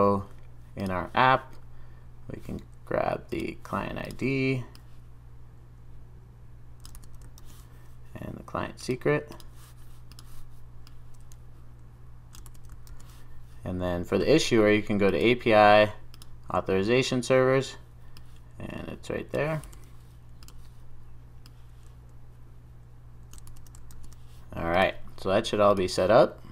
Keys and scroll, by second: 6.9 super+v, 12.5 super+v, 23.5 super+v.